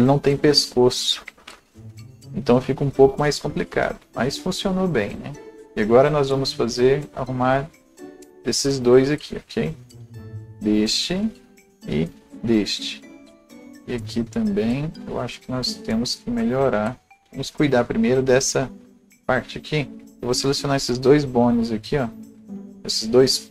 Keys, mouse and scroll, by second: 5.5-9.5 drag, 8.6 ctrl+z, 9.5-13.7 alt+drag, 13.7-17.1 drag, 13.7-17.1 right drag, 17.1-20.1 right drag, 17.1 scroll down 1, 19.2 click, 19.7-20.1 scroll up 1, 20.1 click, 20.8-23.5 drag.